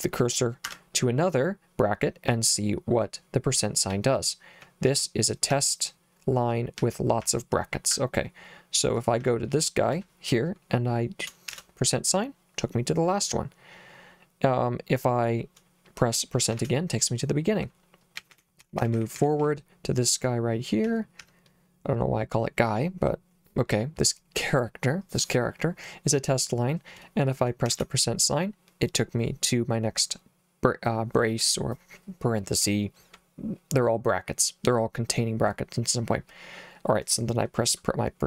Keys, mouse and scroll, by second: 0.7 Escape, 3.9 j, 4.9 j, 5.5 h, 6.8 l, 7.3 j, 7.9 h, 9.2 h, 11.5 shift+5, 16.5 shift+5, 18.2-19.4 typing, 20.8 h, 21.2 h, 27.7 shift+5.